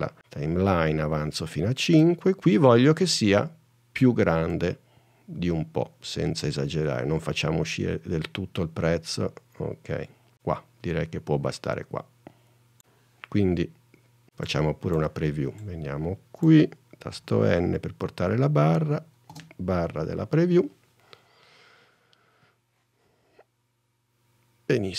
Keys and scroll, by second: 17.3 n, 19.5 space.